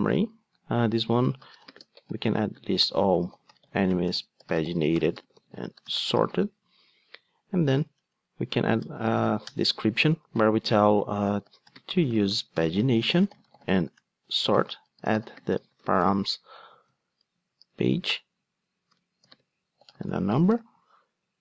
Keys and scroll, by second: 9.6 Return.